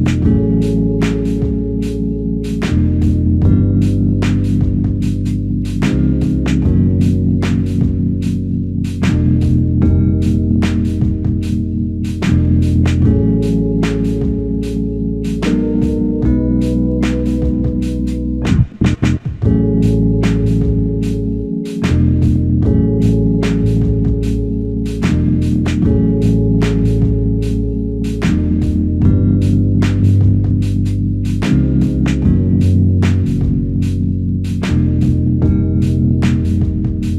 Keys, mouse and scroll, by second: 2.1 f, 3.4 double click, 7.9 shift+click, 9.2 shift+click, 10.5 double click, 10.9 alt+click, 15.2 double click, 29.3 alt+click, 30.3 alt+shift+click, 33.9 ctrl+alt+click.